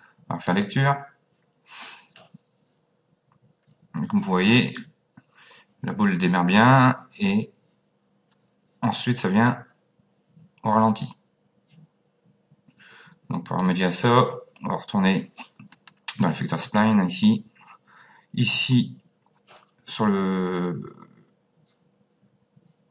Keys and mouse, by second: 0.5 click, 13.4 click, 15.7 click.